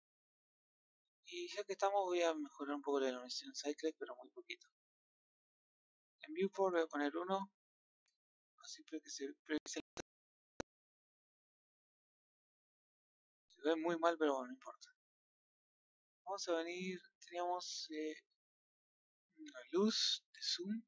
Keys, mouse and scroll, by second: 3.6-9.3 drag, 20.3 click.